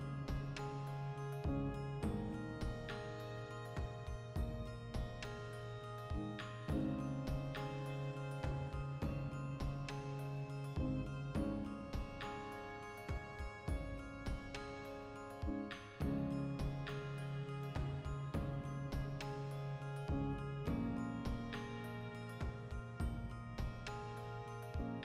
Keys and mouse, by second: 0.1 s, 0.6 click, 0.6 g, 1.1 click, 1.2 s, 1.6 click, 2.0 click, 4.2-11.1 ctrl+middle drag, 6.4 Tab, 8.4 x, 9.3 Tab, 9.6 alt+q, 11.1 click, 11.3 shift+a, 12.3-16.7 shift+middle drag, 12.6 Tab, 15.5 shift+d, 16.5 click, 16.7 g, 18.1-19.2 ctrl+middle drag, 18.1 click, 18.9 2, 19.2 right click, 19.4 ctrl+middle click, 20.1 right click, 20.3 l, 21.5 click, 22.3-24.9 typing, 22.8 right click, 24.2 right click.